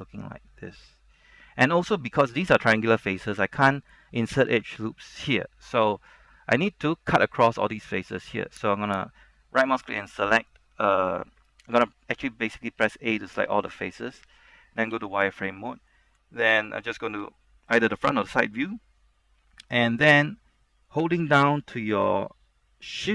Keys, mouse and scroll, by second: 1.0-1.3 scroll down 1, 1.3 middle click, 2.0 scroll up 1, 2.5 shift+middle click, 2.8-3.1 scroll up 1, 3.1 scroll down 1, 3.4-4.5 middle drag, 5.8 scroll up 1, 6.1 shift+middle click, 7.8 scroll down 1, 8.0 shift+middle click, 9.0 right click, 13.0 a, 13.3 a, 14.0 shift+middle click, 15.0 z, 15.4 scroll down 1, 15.6 middle click, 16.6 KP_1, 17.5 shift+middle click.